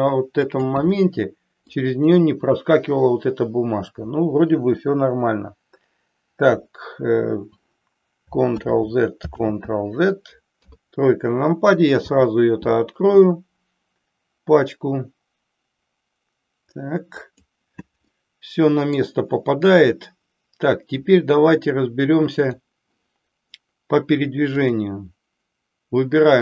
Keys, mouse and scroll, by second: 1.0-1.9 middle drag, 8.5 ctrl+z, 9.4 ctrl+z, 10.5 KP_3, 12.0 r, 17.3 click, 18.1-19.0 middle drag, 24.4 click, 26.3-26.4 drag.